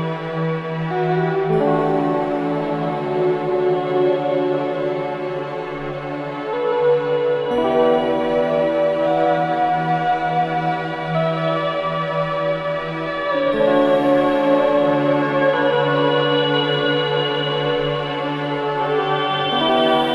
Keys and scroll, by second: 0.0 ctrl+z.